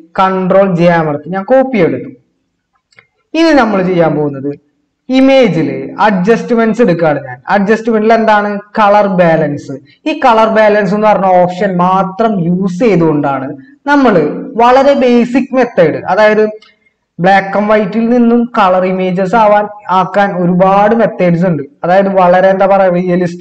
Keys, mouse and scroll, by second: 0.8 ctrl+j.